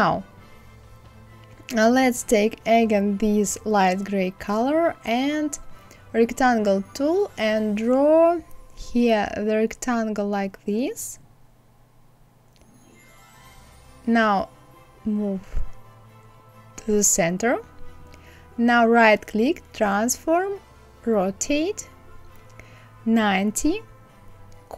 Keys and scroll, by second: 22.4 KP_9, 22.7 KP_0.